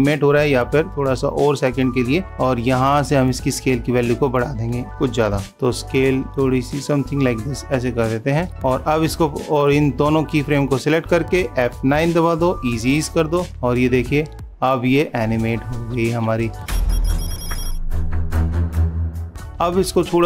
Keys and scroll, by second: 5.4 super+=.